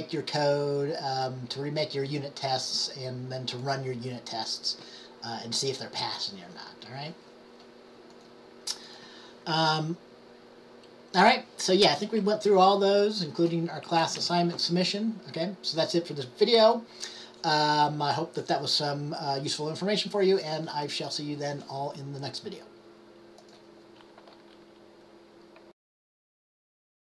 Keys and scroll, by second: 14.1 Up, 14.3 Up.